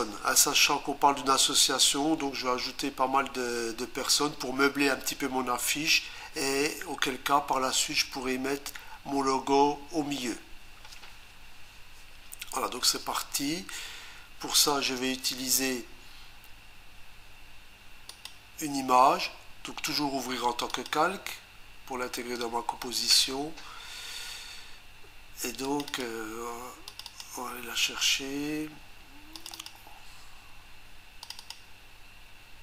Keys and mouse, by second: 18.1 click, 20.7 click, 25.6 click, 25.9 click, 26.0 double click, 26.9 click, 27.1 click, 27.2 double click, 29.4 click, 29.5 click, 29.7 double click, 31.2 click, 31.4 click, 31.5 double click.